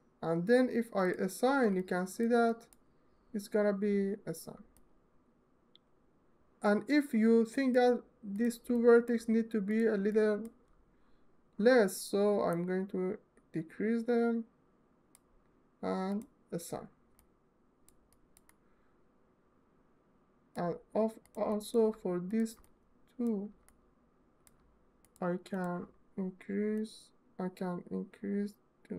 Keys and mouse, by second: 0.7 middle click, 1.7 alt+middle click, 2.4 ctrl+alt+middle click, 4.4-7.0 alt+middle drag, 7.0 alt+click, 8.0 click, 8.5 alt+click, 9.7 alt+middle click, 12.3-14.8 drag, 15.8 click, 16.8-17.8 alt+middle drag, 19.3 alt+middle click, 21.3 alt+middle click, 21.9 shift+middle click, 22.4 alt+middle click, 23.3 alt+middle click, 24.8 shift+click, 26.4-28.9 drag.